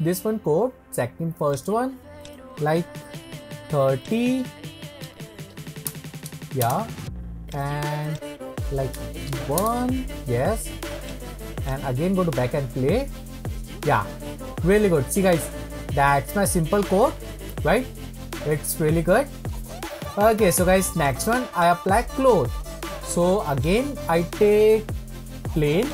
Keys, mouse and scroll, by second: 7.5-10.5 drag, 11.0-14.7 drag, 21.0-22.1 drag, 22.1-23.6 scroll down 1, 23.6-25.9 drag.